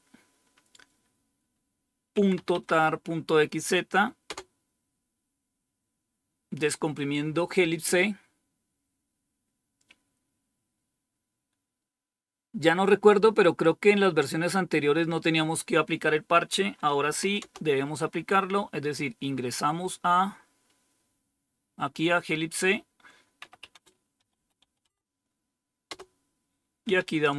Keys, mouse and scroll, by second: 1.8-2.7 typing, 4.2 typing, 16.9-17.6 typing, 19.2-21.8 scroll up 3, 19.2-20.1 typing, 21.9-23.3 scroll down 3, 23.1-27.3 typing, 25.8 Return.